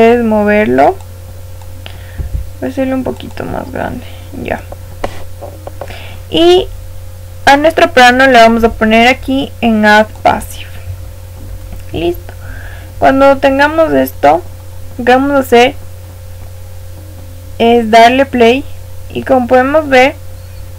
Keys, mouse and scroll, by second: 0.9 click, 2.1 s, 3.6-5.5 middle drag, 5.5-6.3 scroll up 1, 6.3-10.1 scroll up 1, 10.1 click, 11.5-13.4 middle drag, 14.4 middle click, 14.7-15.4 scroll down 1, 15.4-17.9 middle drag, 17.9 click, 20.4-20.7 middle drag.